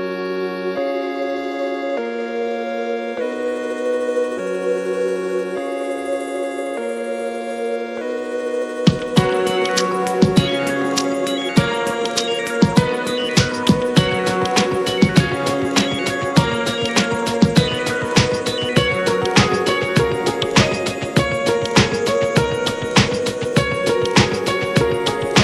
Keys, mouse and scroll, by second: 3.0-5.9 middle drag, 5.9-8.6 drag, 9.2-10.3 drag, 10.4-12.6 drag, 12.9-13.3 middle drag, 13.3 click, 13.5-14.5 middle drag, 14.5 click, 14.6-15.6 drag, 15.7 scroll down 3, 16.0 middle click, 16.5-22.1 drag, 24.0 click, 24.8-25.2 scroll down 1, 25.2-25.4 middle drag.